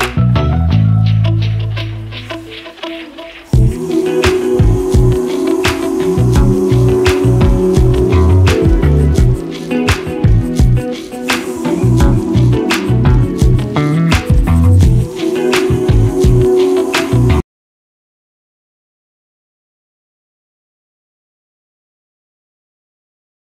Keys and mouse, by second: 1.0 click, 3.0-4.8 drag, 6.2 g, 11.4 click, 11.9-12.2 middle drag, 12.6-12.9 middle drag, 13.7 g.